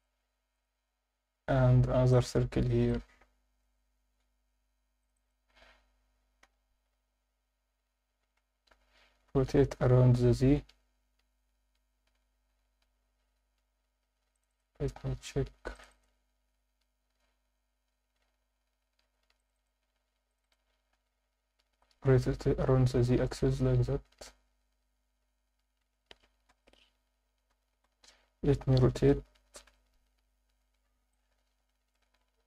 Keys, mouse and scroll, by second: 0.5-2.7 right drag, 2.9 alt+middle click, 3.8-4.4 scroll up 1, 4.4 scroll up 2, 5.0 click, 5.2 click, 6.4 g, 6.9 z, 8.4 Escape, 9.3 r, 9.6 z, 12.5 Escape, 12.8 scroll down 1, 14.3 click, 14.3 scroll down 2, 14.5 click, 14.9 scroll up 1, 15.5 scroll up 1, 15.7 click, 15.9 click, 18.2 scroll down 1, 19.0 scroll down 1, 19.4 click, 19.6 click, 20.3 shift+click, 20.8 scroll up 1, 21.7 r, 22.1 z, 26.5 ctrl+KP_Add, 27.7 r, 28.1 z, 29.7 Escape, 30.0 scroll down 2, 30.1 Tab, 30.5 Tab, 30.6-31.1 scroll up 2, 31.1 alt+middle click, 32.1 Tab.